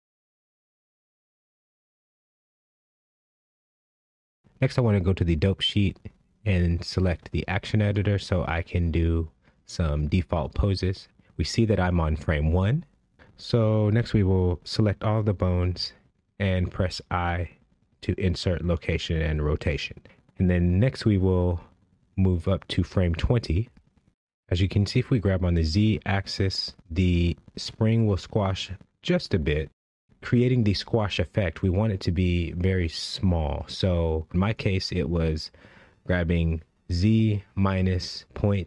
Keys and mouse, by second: 4.0-6.7 right drag, 9.5 click, 10.8-12.3 drag, 14.3 a, 16.8 i, 19.1 click, 21.4 click, 24.9 g, 26.4 z, 26.9 KP_Subtract, 27.4 KP_Decimal, 27.7 KP_0, 28.0 KP_5, 28.3 KP_Enter, 29.5 click, 30.6-32.4 typing, 31.6 KP_Subtract, 32.7 KP_Enter, 34.2 click, 35.1 g, 36.0 z, 36.5 KP_Subtract, 37.0 KP_Decimal, 37.3 KP_0, 37.5 KP_5, 38.0 KP_Enter.